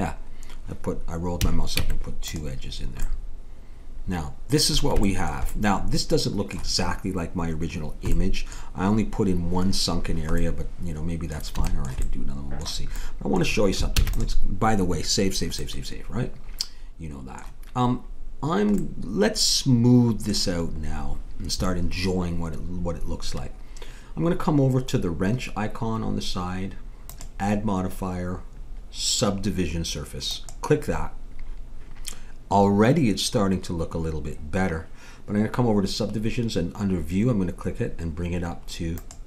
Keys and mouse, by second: 1.4 a, 1.8 Tab, 5.9-7.6 middle drag, 8.1-10.9 middle drag, 13.9 ctrl+s, 18.8 middle click, 27.1-28.9 drag, 39.0-39.2 drag.